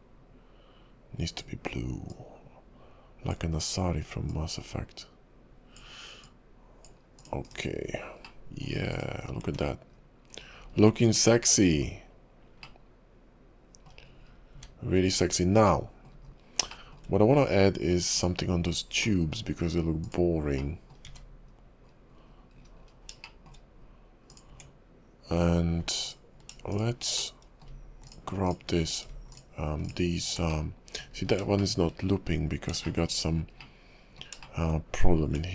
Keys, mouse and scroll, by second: 7.2 click, 7.5 /, 8.4 middle click, 8.9 click, 9.3-9.9 scroll down 3, 9.5 `, 9.9 KP_5, 10.4-11.0 scroll up 7, 11.0 scroll down 1, 11.9-12.7 scroll up 2, 12.8 middle click, 14.3-14.7 scroll down 5, 14.6 `, 15.3-15.6 scroll up 3, 15.8 middle click, 16.2 KP_5, 16.9 shift+middle click, 18.2 click, 19.2 middle click, 20.0 click, 20.6 middle click, 21.1 `, 21.5 KP_5, 21.9-22.5 scroll down 4, 22.5-23.0 scroll up 8, 23.2 shift+middle click, 24.3 click, 24.5 Tab, 26.0 alt+click, 26.7 alt+shift+click, 27.2 middle click, 28.0 alt+shift+click, 28.5 alt+shift+click, 29.3 alt+shift+click, 29.8 alt+shift+click, 30.5 middle click, 31.1 scroll up 4, 31.6 shift+middle click, 32.1 KP_5, 32.5 scroll up 2, 32.8 shift+middle click, 33.6 middle click, 34.4 KP_3, 34.5 shift+middle click, 35.3 Tab.